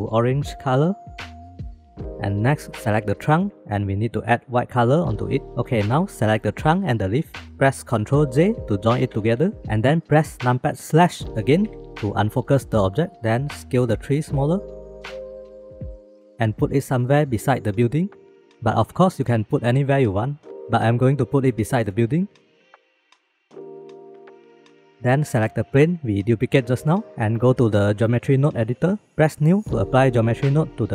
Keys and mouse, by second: 4.4 click, 6.4 click, 9.1 ctrl+j, 11.6 KP_Divide, 14.0 s, 15.4 click, 16.5 s, 17.5 click, 17.9 click, 19.0 click, 19.6 click, 20.1-20.9 shift+middle drag, 21.0 middle click, 21.4 s, 21.7 middle click, 21.8 s, 21.9 shift+middle drag, 22.4 KP_3, 23.1-23.7 drag, 23.7-24.0 middle drag, 24.0 click, 24.5 middle click, 24.8 ctrl+s, 26.3 click, 29.1 ctrl+z.